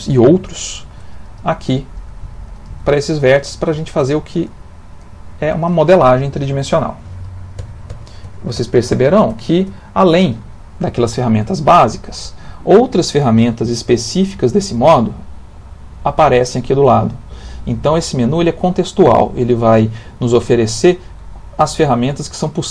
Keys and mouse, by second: 0.7 shift+click, 1.4 g, 2.5 click, 2.6 g, 3.8 click, 4.0 g, 5.0 click, 5.2 g, 7.6 ctrl+z, 7.9 ctrl+z, 8.2 ctrl+z, 8.6 ctrl+z, 8.9 ctrl+z, 9.3 ctrl+z, 9.7 ctrl+z.